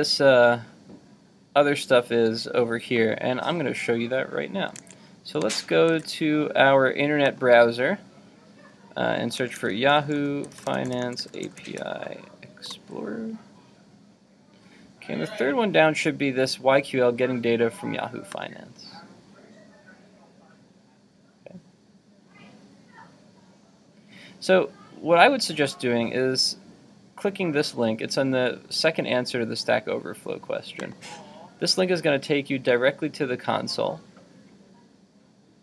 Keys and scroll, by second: 4.8 super+Tab, 5.9 super+w.